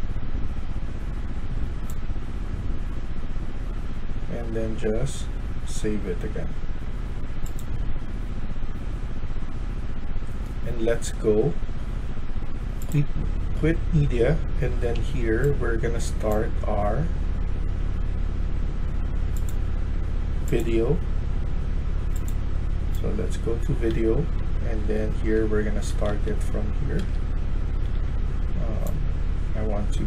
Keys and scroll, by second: 15.0 a, 15.4-16.1 w, 22.8-26.0 typing.